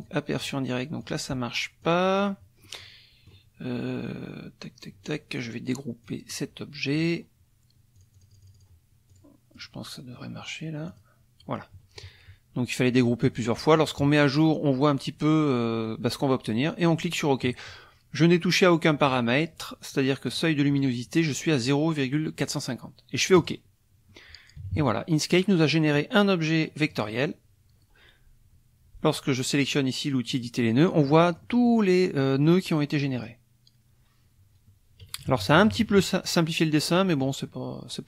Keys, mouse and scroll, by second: 0.4 click, 1.0 click, 1.8 click, 2.2 click, 2.6 middle click, 3.1 click, 6.1 click, 7.0 click, 7.9 click, 9.1 click, 9.5 click, 10.9 click, 13.8 click, 20.3 click, 23.3 click, 24.6 KP_Subtract, 26.0 click, 30.3 click, 30.9 middle click, 31.4 click, 32.2 click, 33.2 click, 35.2 KP_Subtract, 36.9 click.